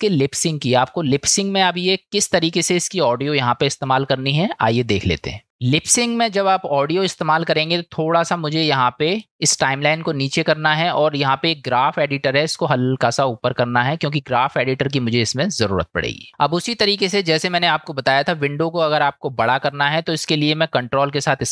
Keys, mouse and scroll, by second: 1.3 middle click, 9.3-21.1 drag.